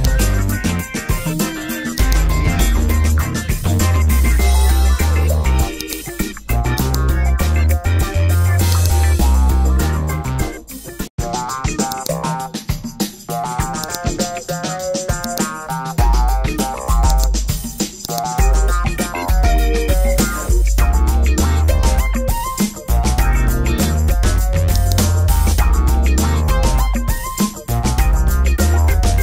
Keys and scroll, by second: 26.9 Tab, 27.9 BackSpace, 28.5 5, 28.7 Return.